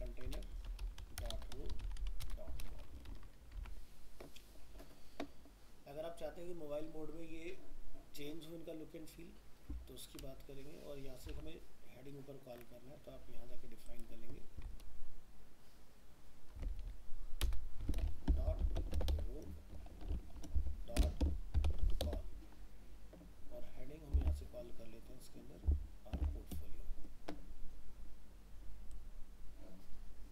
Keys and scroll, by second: 3.1 ctrl+s, 3.6 alt+Tab, 11.3 alt+Tab, 24.2 alt+Tab.